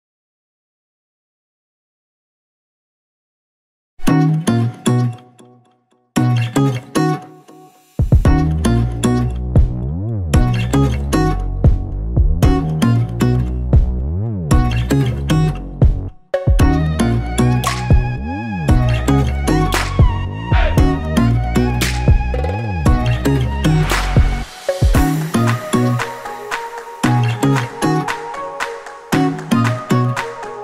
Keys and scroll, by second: 19.8 Return, 22.5 g, 27.1 Return.